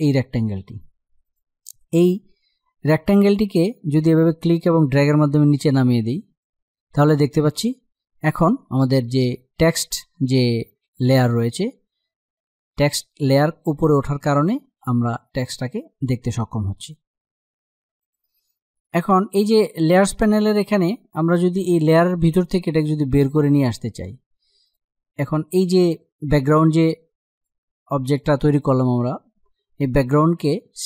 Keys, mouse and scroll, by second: 0.9 click, 4.1-10.5 drag, 19.6 click, 27.0 click.